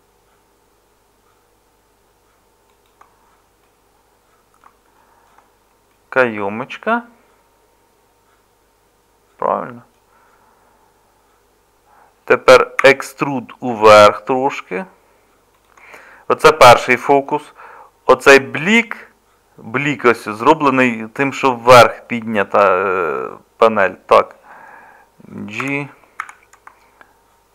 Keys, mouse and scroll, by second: 12.8 e, 25.6 g.